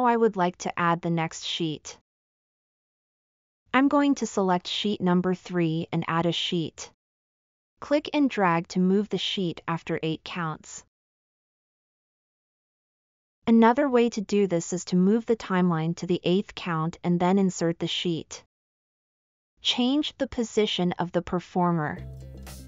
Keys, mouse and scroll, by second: 5.0 click, 7.9 click, 8.4-10.5 drag, 12.1-13.8 drag, 16.2 click, 21.3 middle drag, 21.6 middle drag, 21.8 middle click, 22.0 middle click.